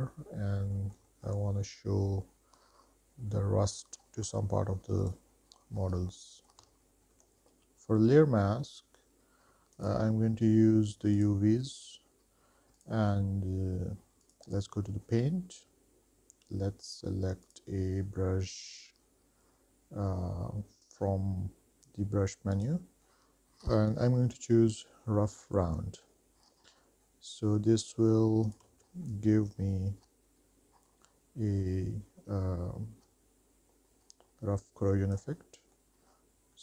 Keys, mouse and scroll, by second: 1.0 middle click, 1.4 shift+middle click, 4.5-5.2 scroll down 4, 5.2 click, 6.0-6.5 scroll up 3, 6.7 middle click, 6.9 ctrl+z, 10.0-11.6 drag, 13.0 click, 14.4 click, 17.6-21.2 drag, 22.7-24.8 drag, 26.7-29.1 drag, 29.1 x, 29.5-35.6 drag, 35.9 middle click, 36.5-36.6 scroll up 4.